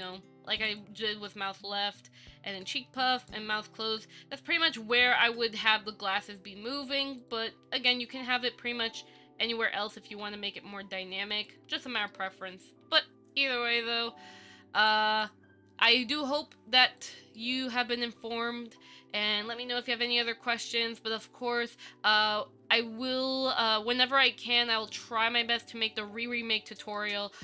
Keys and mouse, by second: 0.2 click, 9.0-10.3 Down, 11.6 Down, 11.6 click, 12.3 middle click, 13.0 KP_1, 14.7 right click, 15.0 right click, 17.6-18.0 shift+middle drag, 25.8 KP_5, 27.2-27.4 middle drag.